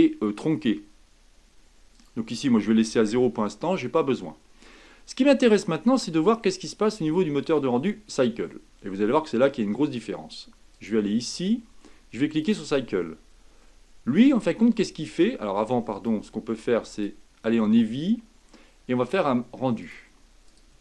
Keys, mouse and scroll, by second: 3.1-5.6 drag, 5.6-8.6 middle drag, 12.5-13.6 drag, 13.6-15.9 middle drag, 15.9-20.8 drag.